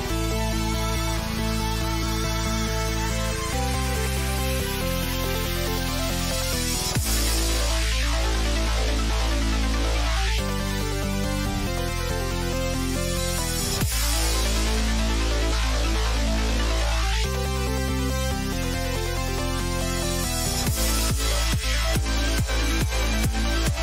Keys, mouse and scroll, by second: 2.9-7.1 drag.